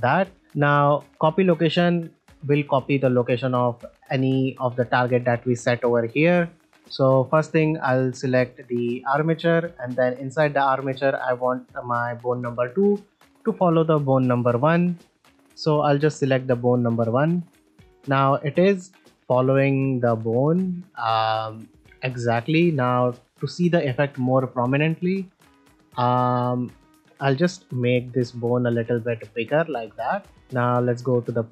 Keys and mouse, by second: 0.3 shift+middle drag, 0.5 shift+middle click, 2.1 click, 9.7 shift+middle click, 15.4-16.7 drag, 17.8 shift+middle click, 18.3 middle click, 19.8 z, 20.7-21.1 ctrl+middle drag, 23.8 Tab, 25.0 shift+middle click, 25.4 ctrl+middle click, 27.9-29.5 drag, 30.3 ctrl+Tab.